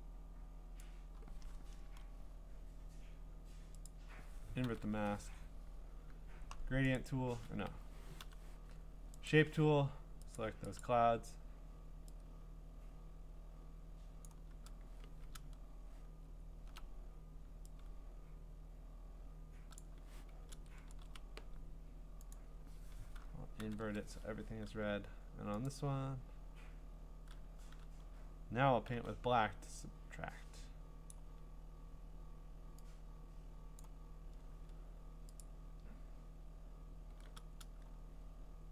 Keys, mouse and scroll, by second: 0.8 click, 1.8 Return, 3.9 click, 4.7 ctrl+i, 5.2 g, 7.0 right click, 7.7 Escape, 8.2 u, 9.3 right click, 10.4 click, 10.8 click, 14.2 click, 15.3-16.7 scroll, 19.8 click, 20.5 ctrl+z, 20.9 ctrl+z, 22.3 click, 23.6 ctrl+i, 25.7 click, 28.9 x, 31.1 click, 33.8 click, 35.4 click.